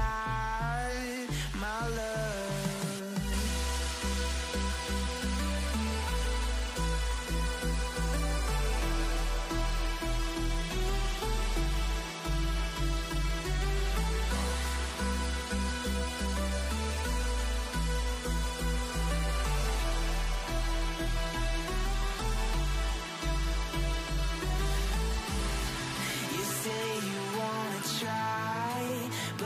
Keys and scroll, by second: 2.1-3.8 typing.